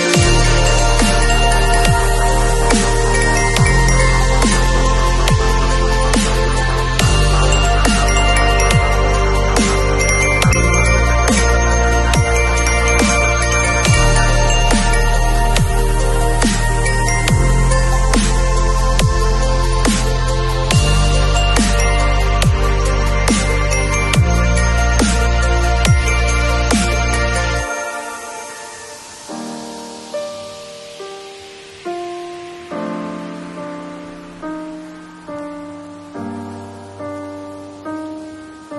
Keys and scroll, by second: 10.7 ], 12.5 [, 18.7 [, 21.8 [, 32.2 0.